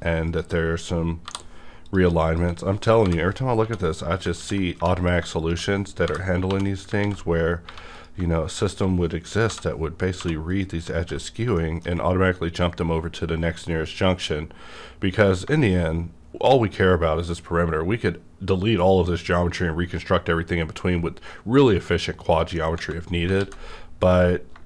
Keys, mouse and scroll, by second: 0.2 shift+click, 1.2 j, 1.8 click, 2.3 shift+click, 3.0 j, 3.6 j, 4.4 ctrl+x, 4.7 1, 5.0 click, 5.0 click, 6.0 j, 6.4 j, 6.6 click, 6.7 j, 7.0 ctrl+x, 7.6 1, 7.9 click, 8.6 shift+click, 9.4 j, 10.1 j, 10.5 shift+click, 10.8 j, 11.0 ctrl+x, 11.3 scroll down 1, 11.5 middle click, 11.6 middle click, 13.8 scroll down 1, 14.7-15.2 scroll down 1, 15.3 scroll down 1, 15.5 shift+middle click, 22.2 shift+middle click, 22.2 scroll down 1, 22.3 shift+middle click, 23.0 scroll down 1, 23.4 alt+x.